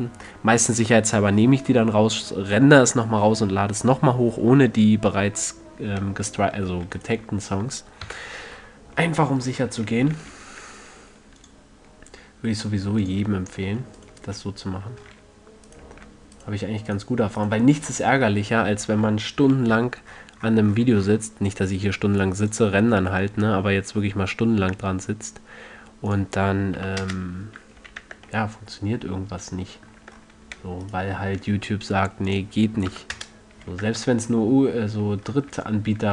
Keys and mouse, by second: 7.3-9.5 right drag, 8.4 KP_3, 10.5 ctrl+e, 13.4 click, 14.3-15.5 middle drag, 15.5-24.0 drag, 15.5 a, 19.8 n, 26.4-28.2 drag, 28.2 a, 28.4 Tab, 30.4 Tab, 33.2-34.2 drag, 33.9 a, 34.2 Tab, 34.3 drag.